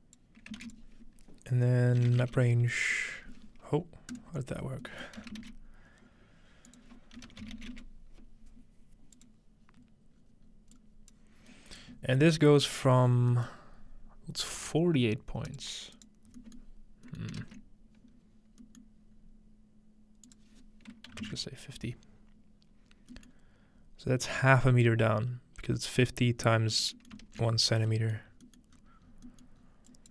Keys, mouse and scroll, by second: 0.6 typing, 0.7 shift+click, 1.9-2.8 typing, 4.1-5.9 drag, 5.2-5.5 typing, 6.7-8.0 shift+drag, 7.2-8.2 typing, 9.2 click, 10.2-10.6 scroll down 2, 10.8 click, 11.4-12.9 scroll down 4, 11.8 middle click, 12.5 middle click, 12.8 middle click, 12.9 scroll up 2, 13.5-15.5 middle drag, 13.7 scroll up 1, 15.5 click, 16.6 middle click, 19.2-20.3 scroll up 2, 20.3 click, 22.8-23.1 scroll down 2, 23.1-24.7 middle drag, 23.7 scroll up 2, 23.8 scroll down 2, 23.9 scroll up 1, 24.0-24.6 scroll down 1, 24.7-26.4 scroll up 1, 26.4-28.3 scroll down 3, 27.1 middle click, 27.3 ctrl+space, 28.3-30.1 scroll up 4, 29.9-30.1 drag.